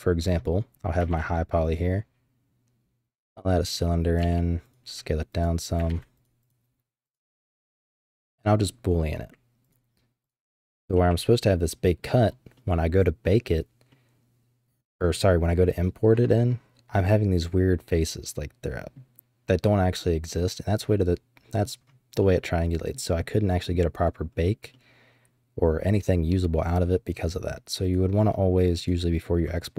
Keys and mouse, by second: 1.1 shift+a, 4.1 g, 4.9 s, 5.9 ctrl+a, 6.4 click, 7.1 click, 9.0 click, 10.2 click, 10.5 h, 10.9-12.0 drag, 12.5-12.9 drag, 13.9-15.7 middle drag, 16.3-18.9 middle drag, 20.9 middle click, 22.2-22.9 middle drag, 23.1-23.7 middle drag, 24.7-27.4 middle drag, 27.8 click, 28.7 click.